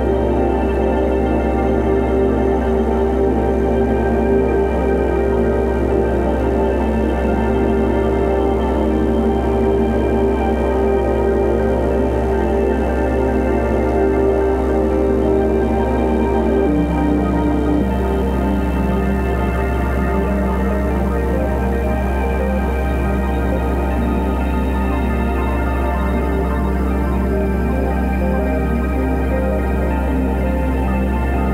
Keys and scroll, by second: 7.7 space, 11.0 super+[, 11.7 super+b, 13.0 [, 15.6 0, 21.0 2, 21.3 ], 22.1 ], 22.7 [, 23.8 v, 23.9 space, 25.1 super+l.